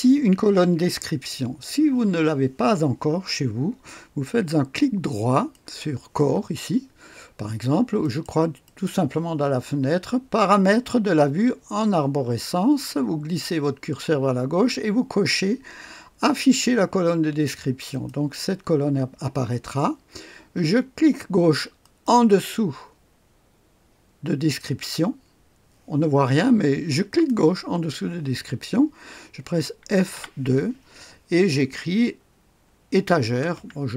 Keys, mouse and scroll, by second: 5.5 click, 5.8 right click, 6.1 click, 8.0 click, 8.2 right click, 8.6 click, 8.8 right click, 17.9 click, 21.8 click, 27.1 click, 30.1 F2, 33.2-33.9 typing.